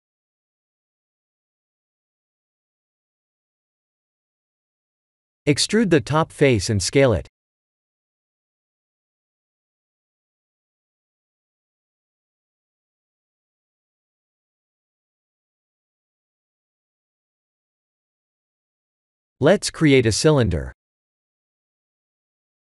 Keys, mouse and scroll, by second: 2.6 middle click, 3.3 click, 4.0 3, 4.1 click, 5.2 Tab, 5.4-7.9 typing, 5.9 click, 10.4 middle click, 11.8 Tab, 12.5 click, 12.9 middle click, 17.5 KP_1, 18.3 click, 18.8 middle click, 19.7 shift+a.